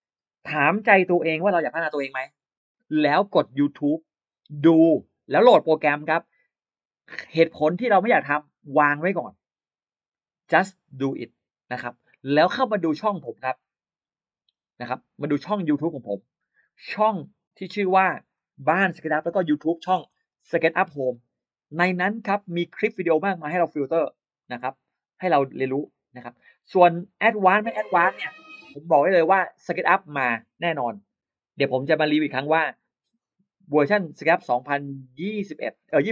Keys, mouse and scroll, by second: 16.4 click, 17.7 click, 19.0-20.3 typing, 23.8 click, 25.5 click, 28.1 click, 29.4-30.9 drag, 32.0-32.3 scroll down 1.